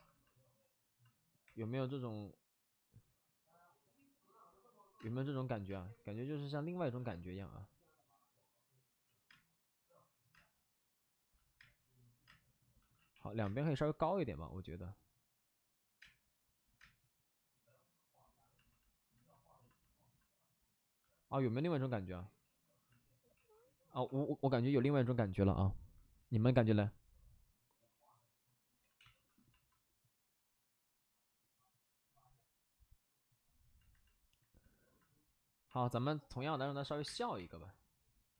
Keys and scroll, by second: 1.4 3, 4.9 space, 5.6 space, 7.4 ctrl+z, 8.9 ctrl+z, 9.2 space, 10.3 space, 11.6 space, 12.2 space, 12.9 x, 13.4 space, 16.0 space, 16.7 space, 22.4 ctrl+d, 23.9 ctrl+d, 23.9 2, 26.1 shift+d, 26.4 shift+f, 28.8 ctrl+z, 29.1 shift+f, 29.8 shift+f, 36.6 shift+d, 36.8 shift+d, 37.0 space, 37.3 3.